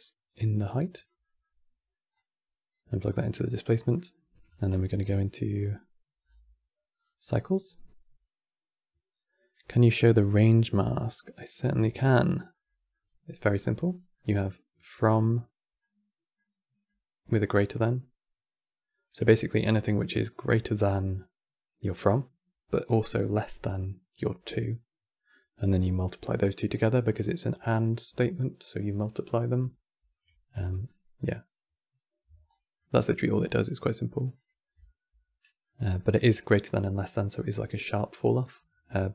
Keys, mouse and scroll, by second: 0.9-1.8 middle drag, 1.8 click, 3.6-4.2 middle drag, 4.2 q, 5.9-6.8 scroll down 7, 6.8 click, 10.3 middle click, 11.3 click, 11.5 Tab, 12.1 scroll down 2, 12.2-13.3 middle drag, 13.3-13.9 scroll up 10, 13.9-19.1 middle drag, 29.7 right click, 31.6-32.2 right drag, 32.2 scroll down 3, 32.5-34.0 middle drag, 34.0 click, 34.5 Tab, 35.3-38.4 middle drag.